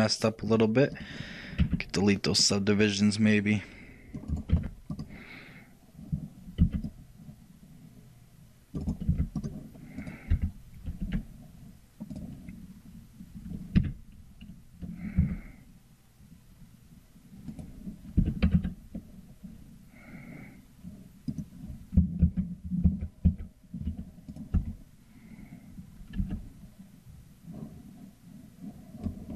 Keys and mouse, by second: 0.6-2.4 drag, 0.6-2.1 right drag, 22.4 ctrl+z, 23.0 ctrl+z, 24.6-26.9 ctrl+drag, 24.6 e.